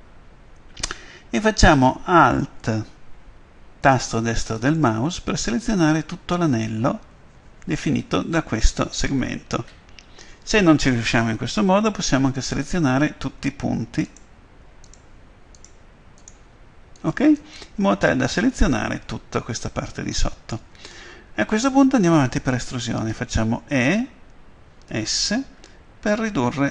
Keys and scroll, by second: 23.8 e, 24.8 s.